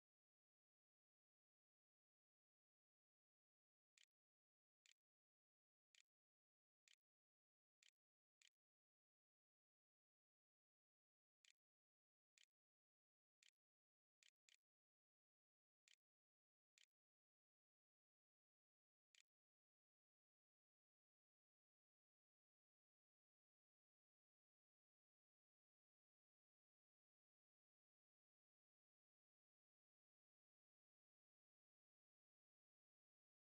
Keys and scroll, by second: 2.3-9.0 typing, 10.3-16.6 typing, 18.0-20.2 typing.